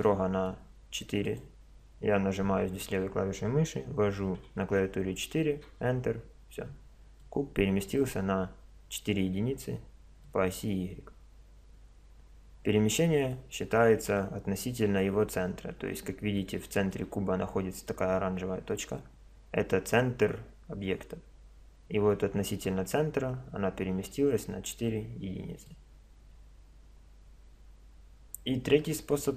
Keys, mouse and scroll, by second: 1.3-3.1 drag, 7.3-12.1 middle drag, 16.5-26.3 middle drag.